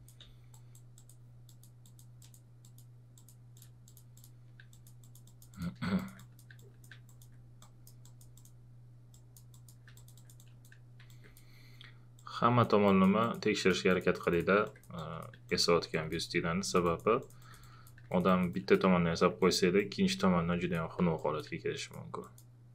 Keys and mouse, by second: 11.1 alt+click, 14.7-21.2 alt+drag, 21.2 click, 21.8 click.